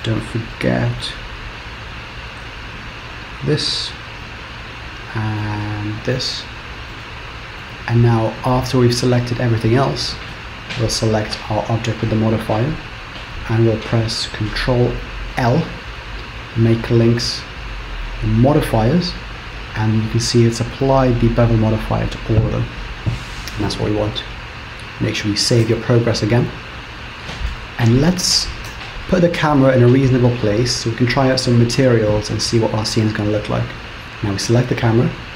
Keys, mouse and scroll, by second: 0.3 middle click, 1.3-2.1 scroll up 2, 3.2 shift+click, 4.4 middle click, 6.1 shift+click, 6.9 middle click, 7.9 scroll down 2, 8.7 middle click, 8.7 scroll down 1, 10.9 shift+click, 15.3 ctrl+l, 19.8 scroll down 2, 19.9-20.4 scroll up 7, 21.0 click, 24.4-24.7 scroll down 4, 25.7 ctrl+s, 28.7 KP_0.